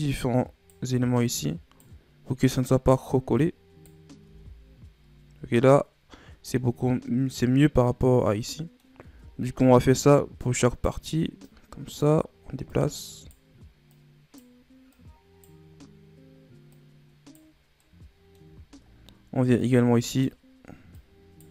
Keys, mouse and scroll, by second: 0.1 right click, 1.1 right click, 2.4 right click, 3.4 right click, 4.2 Tab, 4.6-5.7 scroll down 2, 5.7-6.5 scroll down 1, 6.5-9.0 middle drag, 9.0 Tab, 10.0 right click, 11.4 right click, 12.6 right click, 13.9 right click, 14.9 right click, 16.7 right click, 17.8 middle click, 18.6-19.6 shift+scroll down 3, 19.6 right click, 20.9 right click.